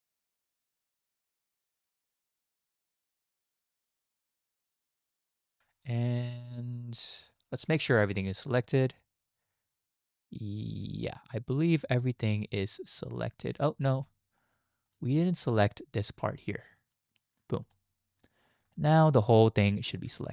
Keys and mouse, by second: 0.1 alt+shift+click, 2.1 shift+click, 2.7-3.7 alt+shift+drag, 3.9 shift+click, 4.6 shift+click, 4.9 alt+shift+click, 5.5 shift+click, 7.6 z, 8.1-11.7 drag, 12.1 shift+click, 12.4-13.5 drag, 13.9 z, 14.4 click, 15.3-15.6 shift+drag, 17.5 shift+drag, 17.7-18.2 drag, 18.5 shift+drag, 18.7-20.0 middle drag, 20.1 z.